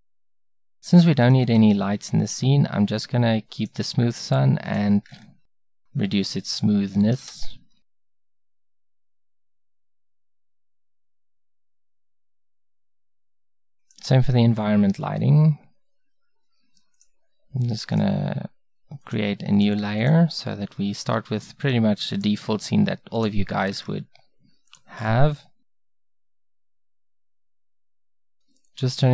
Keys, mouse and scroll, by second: 0.4 x, 1.5 x.